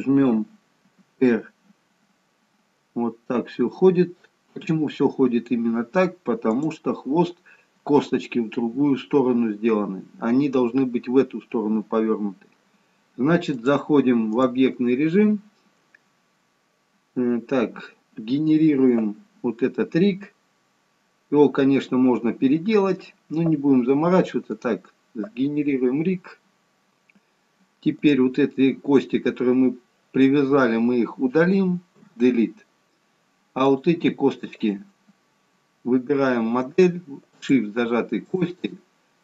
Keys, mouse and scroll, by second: 1.0 r, 13.5 click, 17.4-19.5 scroll down 2, 21.2-22.4 scroll down 3, 23.9 scroll down 1, 24.6 click, 28.0 click, 32.2 Delete, 33.7 click, 34.6 click, 37.4 shift+click.